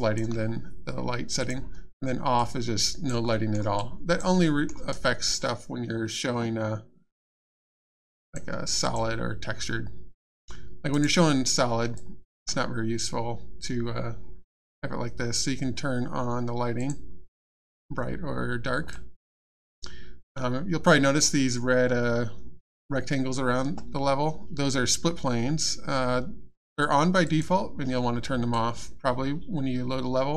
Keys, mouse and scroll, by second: 1.4 click, 2.4 alt+click, 3.3 alt+middle click, 3.8 alt+click, 4.4 alt+middle click, 4.9 alt+click, 7.3 click, 8.8 click, 10.9 right click, 11.9 alt+click, 16.8 click, 18.9 alt+click, 27.2 click, 28.5 alt+click.